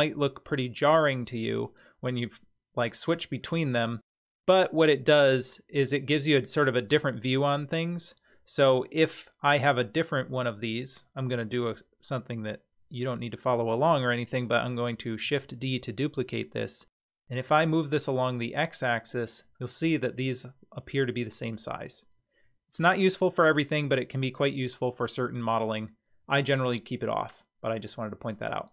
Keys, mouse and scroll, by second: 2.8 click, 3.4 click, 4.5-5.4 scroll up 4, 5.4-7.5 middle drag, 7.8-8.5 scroll down 1, 8.5 scroll down 2, 8.6 click, 15.2 shift+d, 27.7 click.